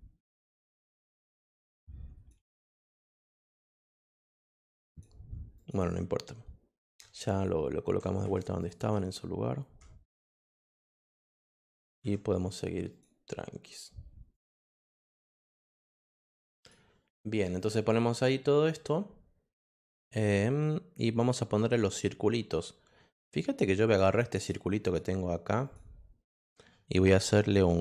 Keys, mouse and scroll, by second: 0.3-2.2 shift+drag, 3.0 click, 4.1 click, 4.8 click, 5.5 click, 8.6 click, 10.4 click, 12.9 click, 14.3-16.1 drag, 16.5 click, 17.6 click, 21.2 click, 23.2 click, 23.8 click, 24.3 click, 24.8 click, 25.6 click.